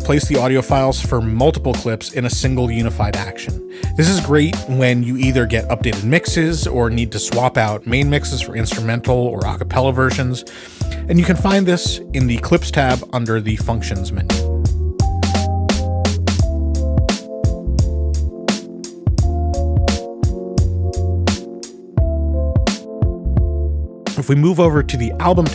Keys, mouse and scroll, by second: 0.8 click, 3.4 click, 14.8 click, 16.9 click, 19.3 ctrl+z, 20.9 ctrl+y, 21.9 ctrl+z, 23.0 ctrl+y, 25.2 click.